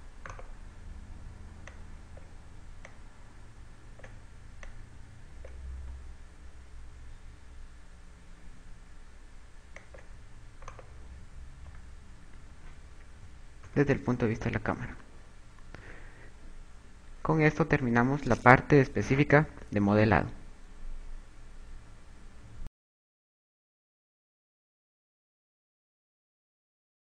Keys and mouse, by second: 0.7 click, 1.1 right click, 2.7 click, 3.7 click, 5.7 click, 6.7 s, 10.9 click, 11.5 right click, 12.5 a, 13.8 KP_6, 14.5 KP_0, 16.6 KP_6.